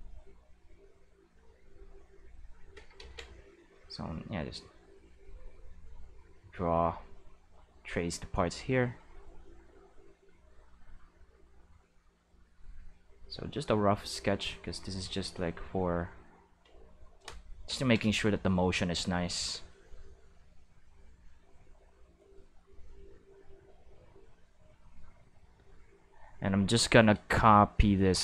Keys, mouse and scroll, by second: 2.9 ctrl+z, 4.1-6.1 drag, 6.9-8.3 drag, 8.7-9.8 drag, 10.6-11.8 drag, 12.2-16.6 drag, 18.6 click, 19.0 space, 19.5 space, 19.7-21.6 drag, 22.9-26.8 drag.